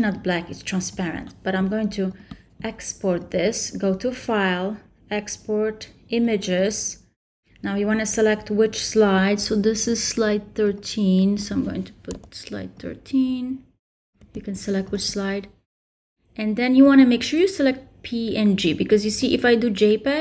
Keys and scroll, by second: 12.1 3, 14.2 3.